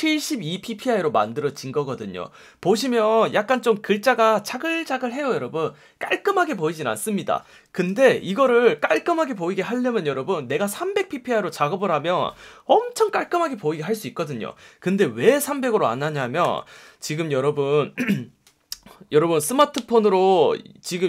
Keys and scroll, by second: 16.4 super+0.